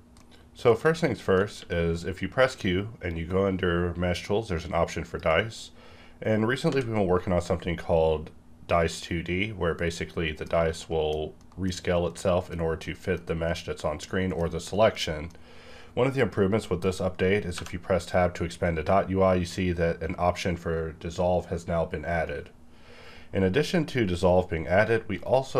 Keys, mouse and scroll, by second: 0.8 shift+Num_Lock, 0.8 alt+click, 0.9 shift+middle click, 1.6 q, 4.9 click, 6.7 v, 10.0 middle click, 10.9 middle click, 11.0-11.4 scroll down 1, 11.4-17.5 middle drag, 17.5 Tab, 25.2 right click.